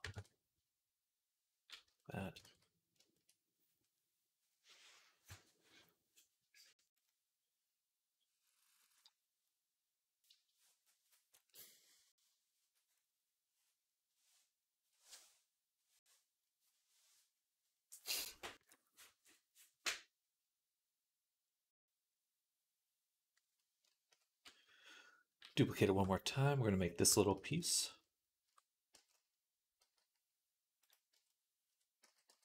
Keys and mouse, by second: 2.3 ctrl+s, 23.9 KP_3, 27.2 shift+d, 28.3 Tab, 28.8 Tab, 29.6 g, 30.7-32.4 middle drag, 31.0 Tab, 31.5 Tab, 31.9 s.